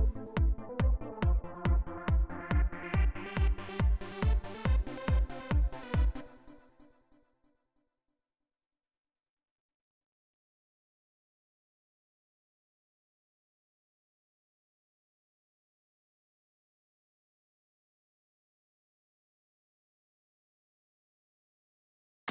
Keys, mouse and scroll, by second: 5.9 space, 6.4 right click, 6.9 right click, 7.5 click, 8.3 click, 8.7 click, 9.4 click, 10.2 click, 10.6 right click, 12.8 right click, 14.5 click, 15.0 right click, 16.0 click, 17.4 click, 19.8 click, 21.4 right click, 22.0 click.